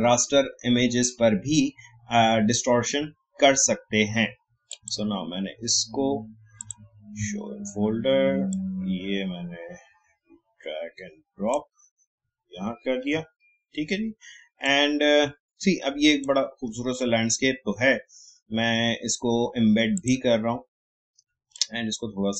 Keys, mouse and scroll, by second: 4.7-13.2 drag, 13.2 alt+scroll down 1, 14.6-16.8 drag, 16.8 alt+scroll up 1, 17.3-17.7 alt+scroll down 1, 19.9 click, 21.5-22.3 drag.